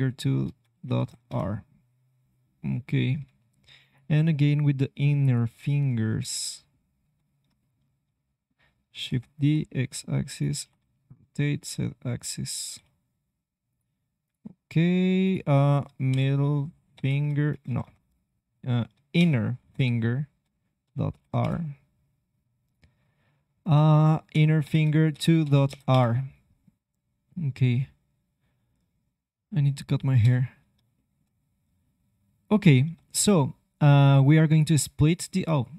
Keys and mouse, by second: 4.0 c, 5.8 middle click, 6.5-7.8 drag, 9.0 shift+d, 10.5 r, 12.6 g, 14.2-17.6 drag, 17.6 BackSpace, 17.8 BackSpace, 22.6-25.9 drag, 29.0-30.3 drag, 30.1 KP_3, 31.1-32.4 middle drag, 32.4-34.4 drag, 34.4 middle click.